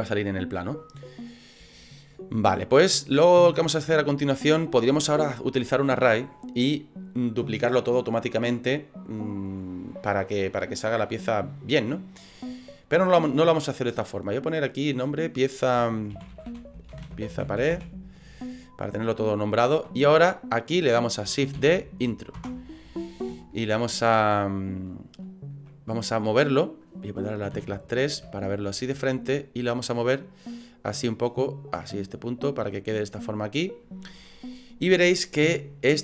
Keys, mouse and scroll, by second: 0.3 middle click, 1.1 scroll up 3, 1.7 shift+middle click, 2.2 scroll up 2, 2.6 middle click, 2.9 middle click, 3.3 scroll up 2, 3.8 shift+middle click, 14.6 click, 14.8 click, 21.7 shift+d, 23.4 ctrl+click, 27.5 KP_3, 28.3 shift+middle click, 29.4 click, 33.1 scroll down 3.